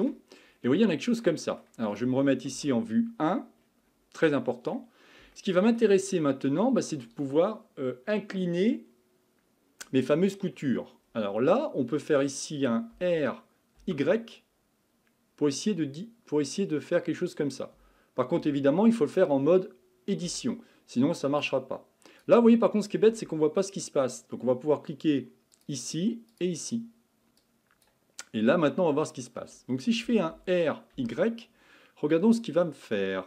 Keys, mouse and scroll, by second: 0.5-1.3 scroll down 4, 1.3-2.5 middle drag, 2.5 KP_1, 3.6-4.2 scroll up 5, 4.2-6.1 middle drag, 6.1-9.2 scroll down 2, 10.3-10.9 scroll up 4, 10.9-12.9 scroll down 2, 12.9 r, 20.3 Tab, 21.4 click, 23.4-25.6 scroll down 2, 25.6 click, 26.3 click, 27.4-28.6 drag, 28.6-29.0 scroll up 2, 29.0-30.3 scroll down 1, 30.3 r.